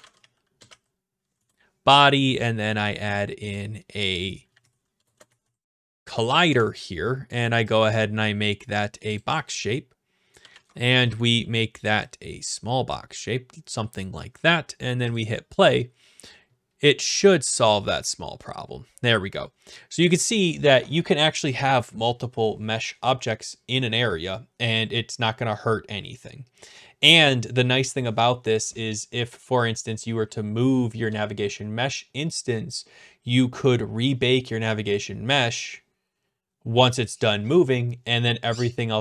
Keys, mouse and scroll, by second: 0.0-1.3 typing, 2.4 typing, 3.4 right click, 3.5 click, 4.2-6.3 typing, 6.5 Return, 8.5 click, 9.2 click, 10.2-11.0 typing, 11.2 right click, 14.1 click, 15.1 click.